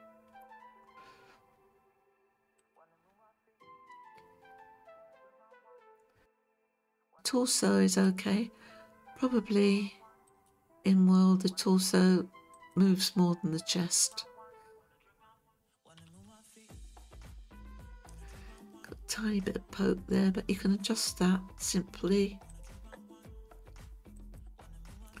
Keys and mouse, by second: 0.9 Tab, 2.6 click, 5.4 Tab, 6.2 click, 7.9-10.5 drag, 12.5 click, 16.0 r, 16.2 r, 24.3 click.